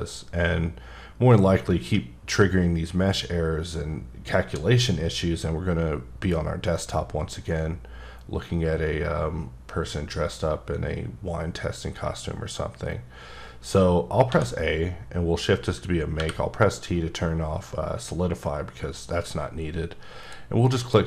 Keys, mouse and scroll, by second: 14.3 a, 16.1 t, 20.2 click, 20.7 middle click.